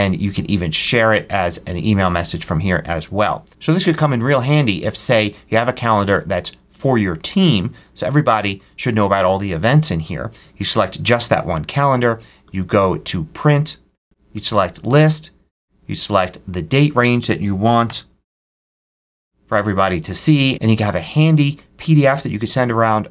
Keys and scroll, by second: 17.7 7, 18.5 Tab.